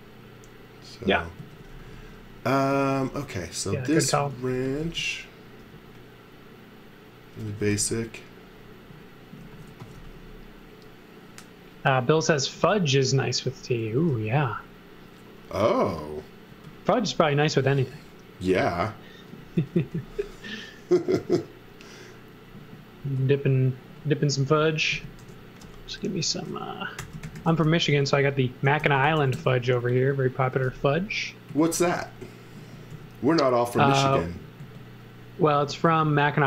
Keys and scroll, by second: 1.1-5.6 typing, 6.6-8.1 typing, 9.2-10.4 typing, 12.6 b, 13.6-14.6 typing, 16.5 space, 17.3 x, 17.8 space, 18.8-20.3 typing, 23.0 space, 25.2 shift+g, 26.7-31.8 typing, 32.9 m.